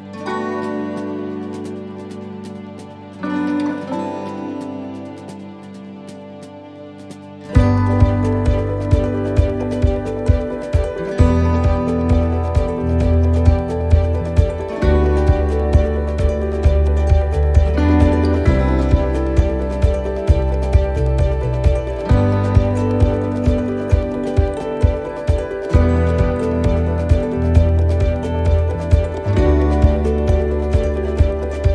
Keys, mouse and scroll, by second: 0.1 y, 0.4 u, 3.7 middle click, 4.2 scroll down 1, 4.6 middle click, 5.7 u, 7.5 click, 8.4 click, 8.9 middle click, 9.3 scroll down 2, 9.7 middle click, 11.2 scroll down 1, 11.6 middle click, 11.9-12.3 scroll up 2, 12.6 right click, 13.0 shift+right click, 13.6 shift+right click, 14.2 shift+right click, 14.6 right click, 14.9 shift+right click, 15.1 right click, 15.4 right click, 16.4 click, 17.6 click, 17.6 middle click, 18.7-19.2 scroll down 4, 19.3 middle click, 19.9 shift+middle click, 20.2-20.9 scroll up 4, 21.1 middle click, 22.2 right click, 22.8 shift+right click, 23.6 right click, 24.1 shift+right click, 26.3 shift+right click, 27.1 shift+right click, 27.8 shift+right click, 29.4 shift+right click, 29.4 middle click, 29.9 scroll down 2, 30.4 shift+middle click, 30.9 middle click.